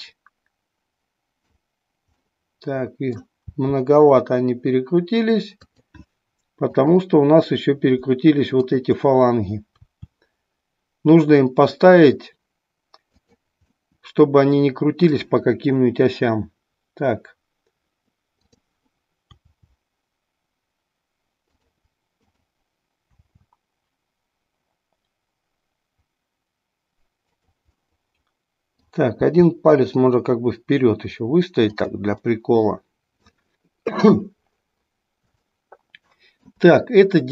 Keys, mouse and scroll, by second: 2.2-3.4 middle drag, 3.6 r, 5.8 click, 6.8-8.0 drag, 8.7-10.2 drag, 10.3 r, 13.2 click, 13.7-15.3 middle drag, 15.3-17.6 scroll down 1, 17.6-18.2 scroll down 1, 18.2-19.5 drag, 19.6 r, 22.3-23.6 drag, 23.7 r, 27.5 click, 27.9 middle click, 29.2 r, 32.3-33.4 middle drag, 35.5-36.6 middle drag.